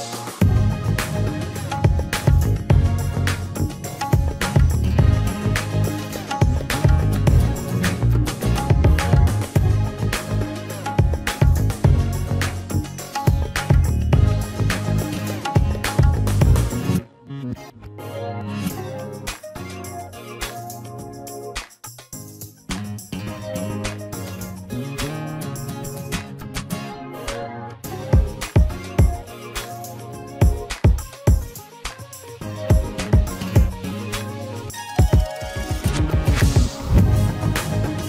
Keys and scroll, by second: 25.9 ctrl+y, 27.5 Delete, 32.5 ctrl+space, 36.2 ctrl+x, 37.9 ctrl+f.